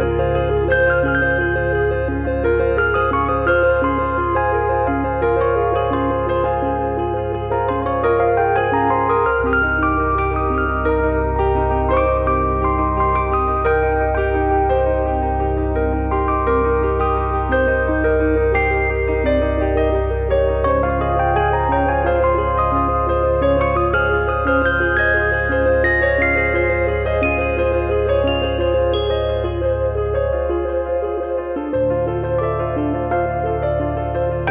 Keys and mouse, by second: 0.0 middle click, 0.2 shift+middle click, 0.6 click, 1.0 e, 2.2 click, 2.9 click, 3.4 f, 4.1 click, 4.9 middle click, 6.5 click, 7.6 click, 8.2 e, 8.9 click, 9.5 f, 10.8 click, 11.9 click, 12.5 click, 13.2 e, 14.4 click, 15.2 e, 15.6 click, 16.0 click, 16.5 f, 16.8 click, 18.1 f, 19.5 click, 19.7 e, 20.6 click, 21.1 f, 21.4 click, 22.1 click, 22.7 click, 23.3 click, 23.9 click, 24.4 e, 24.7 click, 25.0 click, 25.7 click, 26.5 middle click, 28.5 click, 29.5 e, 29.9 click, 30.4 click, 30.8 f, 31.0 click, 31.7 click, 32.3 click, 33.0 super+click, 33.6 f, 33.9 click.